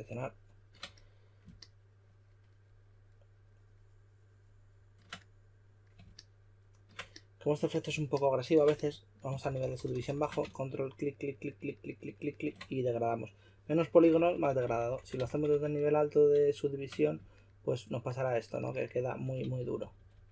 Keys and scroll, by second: 9.1-10.7 typing, 14.0-14.8 typing, 19.4 super+z, 19.6 super+z, 19.8 super+z.